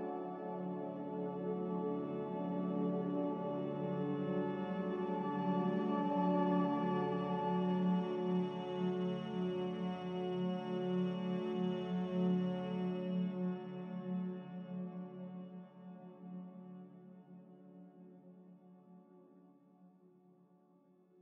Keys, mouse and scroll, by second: 0.5 x, 2.4 z, 5.3 x, 7.0-9.4 typing, 14.5 Escape, 14.6 Escape, 19.9 z, 21.0 g.